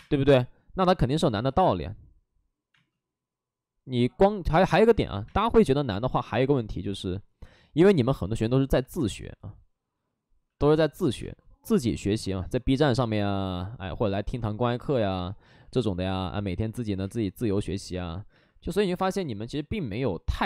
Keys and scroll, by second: 1.3 space, 4.4 space, 7.1 ctrl+z, 11.1 space, 15.4 ctrl+z, 15.9 space, 16.9 space, 19.4 ctrl+d.